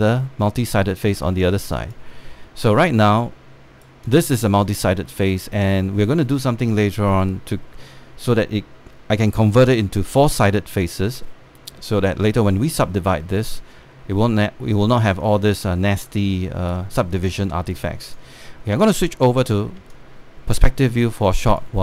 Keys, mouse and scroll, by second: 0.1 click, 3.4 right click, 4.8 click, 5.3 alt+middle click, 6.2 scroll down 1, 6.5 alt+middle click, 11.5 scroll down 1, 11.7-12.4 scroll up 1, 12.5 alt+scroll down 1, 13.8 alt+middle click, 14.5 alt+middle click, 15.9 click, 16.5 right click, 17.8 click, 19.2 scroll down 1, 19.4 space, 19.5 click, 20.3 scroll down 1, 20.7 alt+click, 21.5 scroll up 1, 21.7 alt+click.